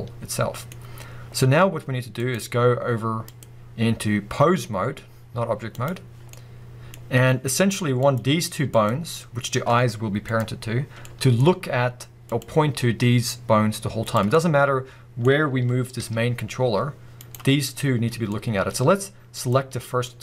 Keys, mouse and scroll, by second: 0.8-2.2 scroll up 2, 2.2 click, 3.3-6.3 drag, 6.3-8.0 middle drag, 8.0 click, 8.7 click, 10.3 click, 11.0-12.3 middle drag, 12.3 click, 14.0 click, 14.3-17.3 middle drag, 15.4-15.9 scroll down 1, 16.0 g, 17.3 right click, 18.3-19.3 middle drag, 19.3 click, 19.7-20.0 scroll up 1, 20.0-20.2 middle drag.